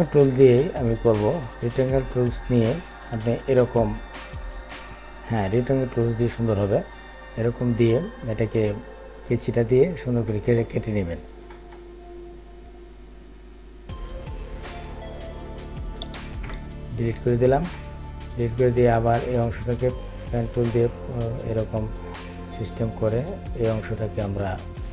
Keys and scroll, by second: 16.2 Delete.